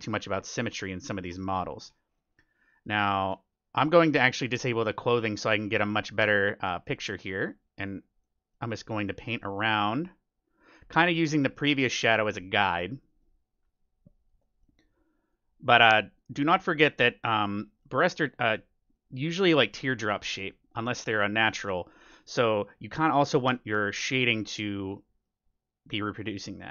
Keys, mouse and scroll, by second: 0.6-4.4 middle drag, 3.3-6.6 drag, 5.3-10.9 middle drag, 7.6-13.5 drag, 11.0-16.0 middle drag, 13.7-19.9 drag, 16.3-24.4 middle drag, 23.6-25.3 drag, 24.9-26.5 middle drag, 25.4-26.7 drag.